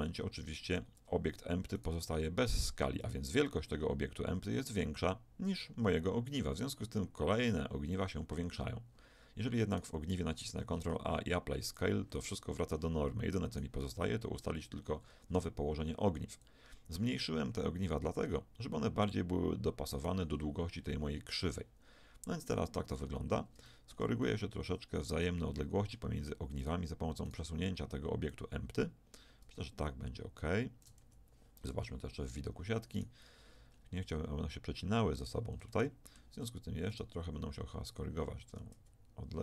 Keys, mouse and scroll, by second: 9.0 middle click, 9.7-11.8 right drag, 10.6 ctrl+a, 13.5-16.4 right drag, 16.4-18.7 drag, 19.9-21.5 right drag, 21.5-23.3 middle drag, 26.6-29.9 right drag, 28.3-30.7 drag, 31.1 z, 31.7 KP_1, 32.9-34.0 drag, 34.0-35.3 middle drag, 35.9 middle click, 36.9 right click, 37.3-39.4 drag, 38.5 g.